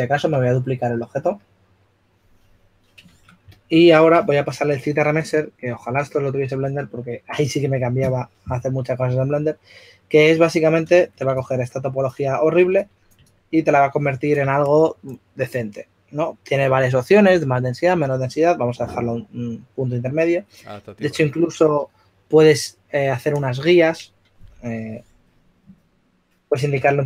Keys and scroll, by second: 4.6 typing, 11.1 shift+f, 25.9-27.0 typing.